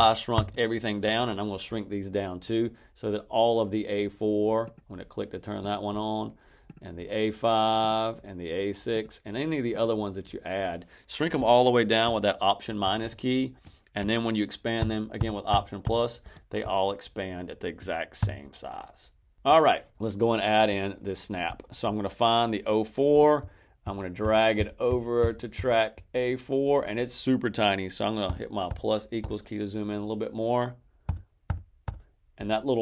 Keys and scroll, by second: 12.7 alt+-, 14.7 alt+=, 18.1 alt+=, 19.3 alt+=, 28.1 =, 30.9 =.